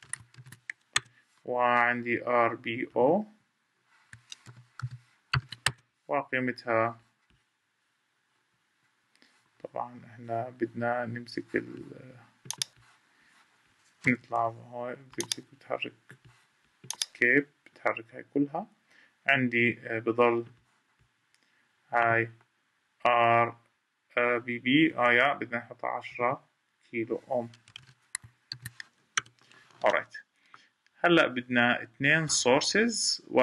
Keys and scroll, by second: 13.8 ctrl+z, 14.4 ctrl+z, 24.6 Escape.